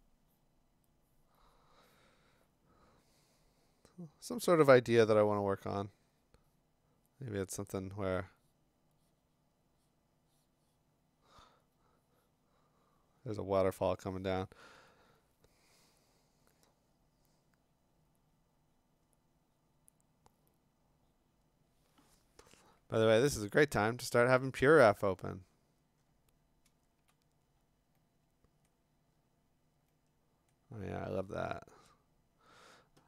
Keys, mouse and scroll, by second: 22.9 click, 23.0 alt+Tab, 23.9-25.5 scroll, 25.5 scroll down 3, 26.0 scroll, 27.4-27.8 scroll, 28.7-29.2 scroll, 30.5 scroll.